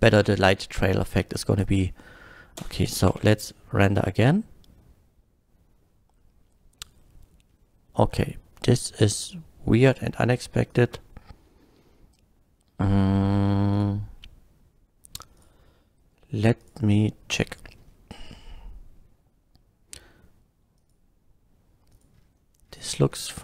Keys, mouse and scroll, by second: 2.7 space, 3.1 F12, 7.6 scroll down 1, 10.7 click, 13.7 click, 15.4 click, 16.6 click, 18.1 scroll down 1, 18.3 scroll up 1, 20.8 click, 21.9 click, 22.1 scroll down 1, 22.7 scroll down 1.